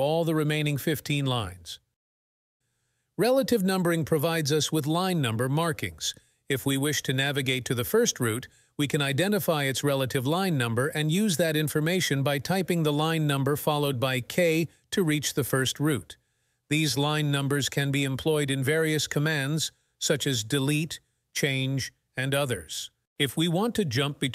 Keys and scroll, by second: 12.4 k.